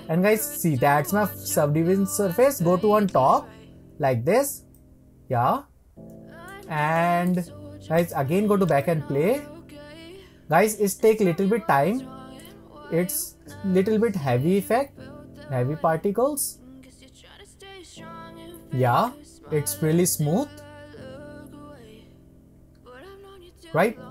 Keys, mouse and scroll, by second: 3.0-4.7 drag, 5.6-6.1 scroll up 2, 6.1-8.0 middle drag, 8.0-12.1 drag.